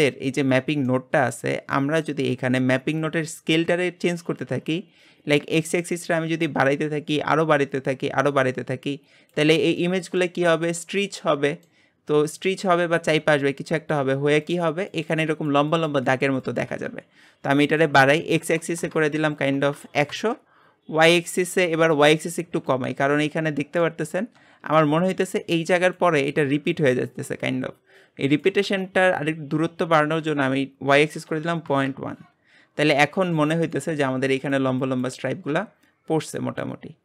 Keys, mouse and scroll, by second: 9.7 scroll up 1, 9.8-11.9 middle drag, 11.9-16.1 scroll down 1, 16.1-18.9 scroll down 1, 18.9-20.1 drag, 20.1 KP_0, 23.1-31.7 middle drag, 31.7-33.0 drag, 33.0-37.0 middle drag.